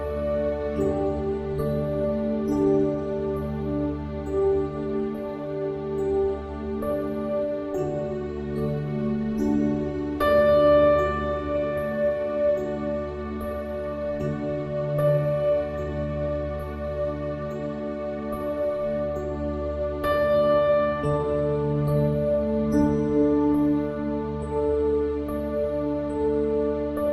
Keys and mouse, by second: 26.8 click.